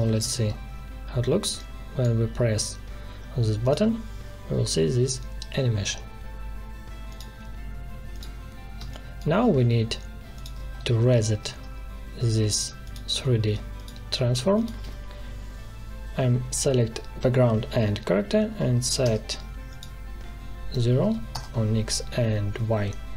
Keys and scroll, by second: 0.1 ctrl+Return, 8.7 space, 18.4 0, 18.9 Return, 20.7 0, 21.3 Return.